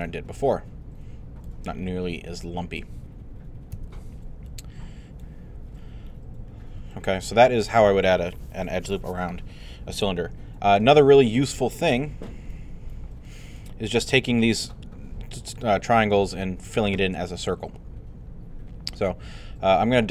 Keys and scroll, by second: 3.7 |.